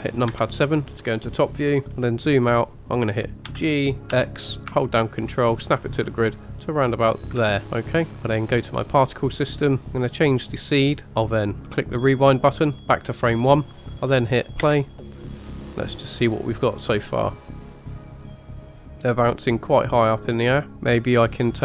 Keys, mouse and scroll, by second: 0.3 KP_7, 1.7 scroll down 4, 1.9 scroll up 3, 2.4-3.4 scroll down 2, 4.1 g, 8.1 middle click, 8.8 click, 10.2 click, 11.5 click, 14.6 space, 18.9 scroll down 2, 20.7 space.